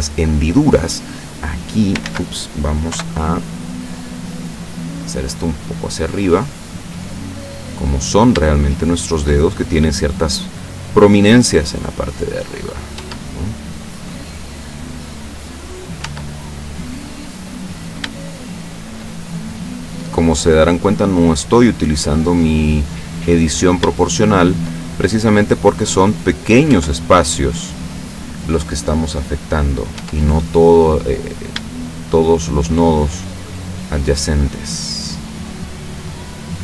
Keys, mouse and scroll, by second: 1.4 click, 2.1 ctrl+z, 3.0 o, 3.5-6.4 drag, 6.7 middle click, 8.1 shift+right click, 8.7 shift+right click, 9.1 shift+right click, 9.6 shift+middle click, 10.7-12.9 drag, 13.0 Tab, 13.7-15.3 middle drag, 15.7 right click, 16.1 Tab, 16.8 middle click, 17.8 shift+right click, 18.3 shift+right click, 18.8 shift+right click, 19.3-22.6 shift+drag, 23.6 right click, 23.9 shift+right click, 24.4 shift+right click, 25.0-26.7 shift+drag, 26.7 Tab, 27.4-28.1 middle drag, 28.7-29.3 middle drag, 29.3 scroll up 1, 29.5-30.0 scroll down 2, 30.0 Tab, 30.5-31.0 scroll up 1, 31.4 right click, 31.9 shift+right click, 32.4 shift+right click, 33.6-35.7 drag, 36.2 right click.